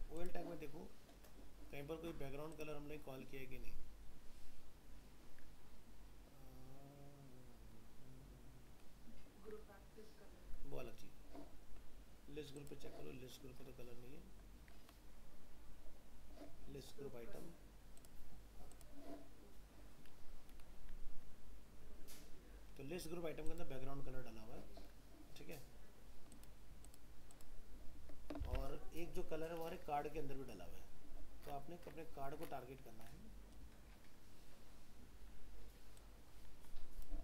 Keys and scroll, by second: 28.4 alt+Tab.